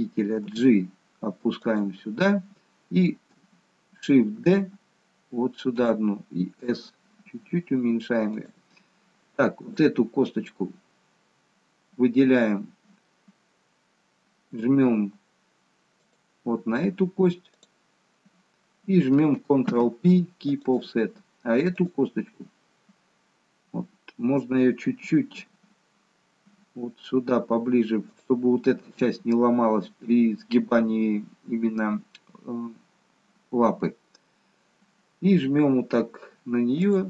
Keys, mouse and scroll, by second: 0.6 g, 4.5 shift+d, 6.9 s, 9.7 click, 16.1 shift+click, 19.8 ctrl+p, 21.9 click, 36.8 shift+click.